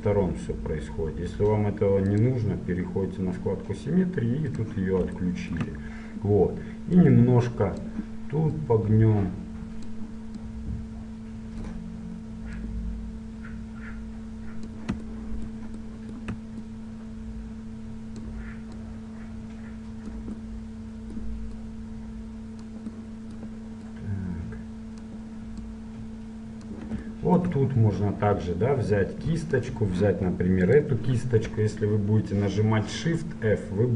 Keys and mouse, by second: 2.2-6.5 drag, 7.1-12.2 drag, 12.7-14.7 drag, 16.8-20.9 drag, 21.7-23.4 drag, 23.4-25.7 middle drag, 25.7-27.2 drag, 27.2-29.7 middle drag, 29.7-31.7 drag.